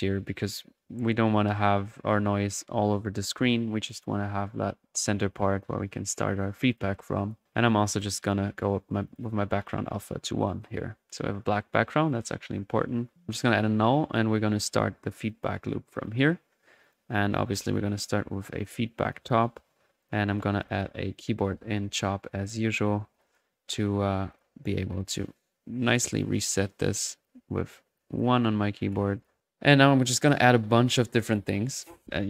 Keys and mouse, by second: 0.3-0.7 drag, 1.7 click, 3.9 click, 6.7 click, 7.2 click, 7.6 click, 9.0 drag, 9.4-10.0 middle drag, 10.1 middle click, 12.1 click, 13.3 alt+n, 13.3 alt+click, 15.3 click, 15.6 typing, 15.9 click, 16.8 right click, 17.2-18.5 typing, 18.6 click, 18.9-20.9 drag, 20.8-21.5 typing, 21.7 click, 22.4 click, 23.0 Escape, 23.1 click, 24.3-28.2 drag, 28.3-29.1 typing, 28.4 click, 29.1 drag, 29.4 middle click, 31.8-32.2 typing.